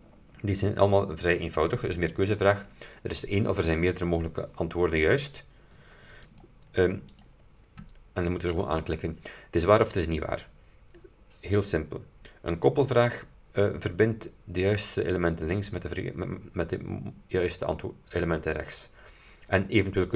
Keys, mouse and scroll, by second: 1.6 click, 6.4 click, 7.2 click, 13.0 click.